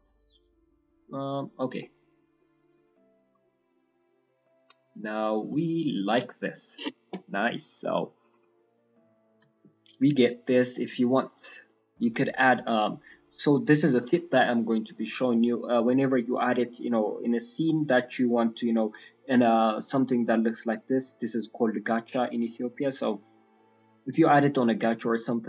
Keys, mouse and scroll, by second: 1.5-2.7 scroll down 5, 1.7 middle click, 2.3 middle click, 2.7-3.2 scroll up 5, 3.0 middle click, 3.2 scroll down 3, 3.4 shift+middle click, 3.7 middle click, 7.5-8.6 scroll down 2, 7.8 middle click, 8.6 middle click, 9.2 shift+middle click, 9.4 shift+middle click, 9.6 ctrl+middle click, 10.1 middle click, 10.7 shift+middle click, 11.3-11.6 scroll down 2, 11.6 middle click, 12.1-12.6 scroll down 1, 14.1-17.2 scroll down 5, 14.4 middle click, 17.2 scroll down 1.